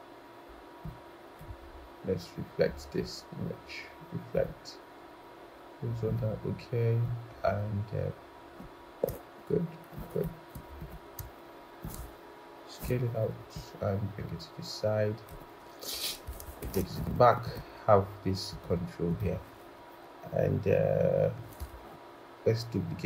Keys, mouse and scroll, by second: 1.4 right click, 9.8 shift+click, 11.1 shift+click, 11.7 shift+click, 12.6 shift+click, 16.5 ctrl+shift+[.